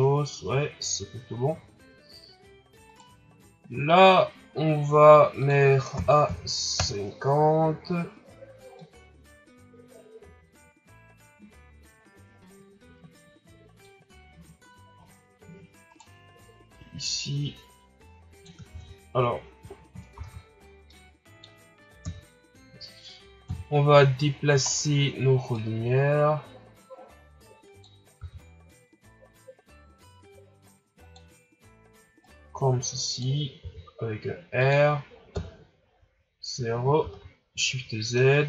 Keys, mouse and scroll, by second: 0.4 scroll up 1, 2.9 right click, 3.6-4.0 scroll down 1, 4.0-5.4 scroll up 2, 5.4-8.5 drag, 8.8-11.9 drag, 14.9 scroll down 5, 15.9 right click, 16.7-18.7 drag, 18.7 ctrl+z, 20.5 shift+z, 20.9-22.0 middle drag, 22.0 KP_3, 23.4 KP_7, 24.2-25.5 scroll down 6, 25.5-28.2 drag, 28.2 r, 32.3-33.6 drag, 33.6 r, 35.3 KP_0, 36.6-37.2 scroll up 1, 37.2 shift+z.